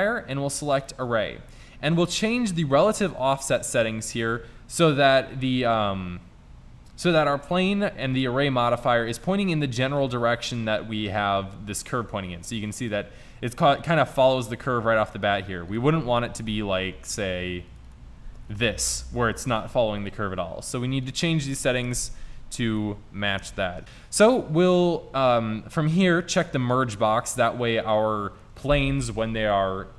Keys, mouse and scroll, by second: 9.6-12.1 middle drag, 15.7-19.9 drag, 21.1-23.8 drag, 26.6-28.4 drag.